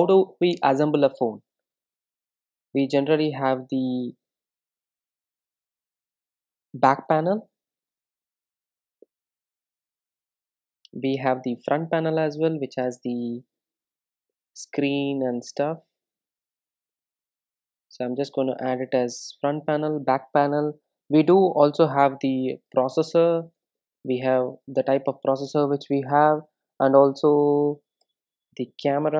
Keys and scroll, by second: 3.0 Return, 11.4 super+d, 19.8 Return.